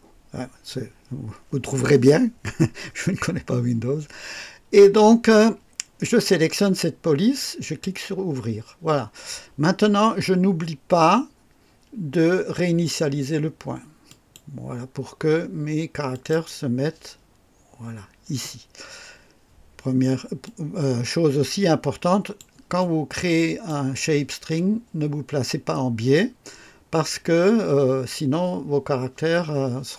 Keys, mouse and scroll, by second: 7.5 click, 14.0 click, 16.1 click, 20.4-22.5 drag, 22.7 click.